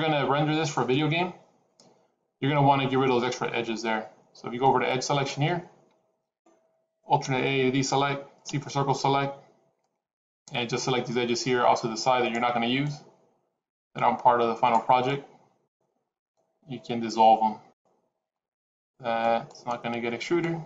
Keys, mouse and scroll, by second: 5.0 click, 7.1 alt+a, 8.3 c.